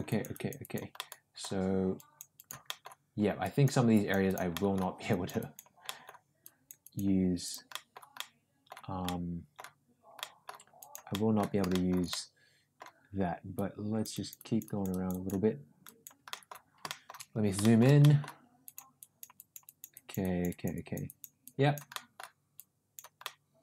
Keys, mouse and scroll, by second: 0.0 click, 0.3 click, 0.6 click, 0.9 middle click, 1.9 click, 2.3 click, 2.6 middle click, 3.4 click, 3.9 click, 4.2 click, 4.5 middle click, 5.1 click, 5.3 click, 5.8 middle click, 6.4 click, 6.8 click, 7.4 click, 7.7 middle click, 8.1 middle click, 9.0 middle click, 10.1 middle click, 10.7 click, 11.1 middle click, 11.7 shift+middle click, 12.0 middle click, 13.5 click, 14.1 click, 14.8 click, 15.8 click, 16.3 middle click, 16.8 shift+middle click, 17.6 shift+middle click, 18.0 middle click, 18.6 click, 18.9 click, 19.3 click, 19.6 click, 19.9 click, 20.2 click, 20.7 click, 21.0 click, 21.4 click, 21.9 middle click, 22.6 click, 23.3 middle click.